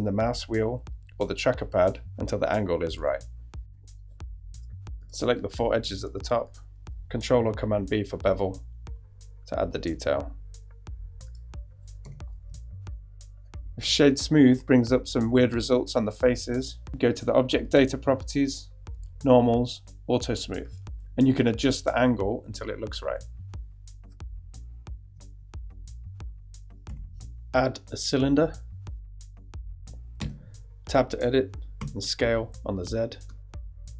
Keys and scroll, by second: 3.3 g, 7.9 shift+super+b, 12.2 Tab, 26.9 shift+a, 30.2 Tab, 31.8 s, 32.1 z.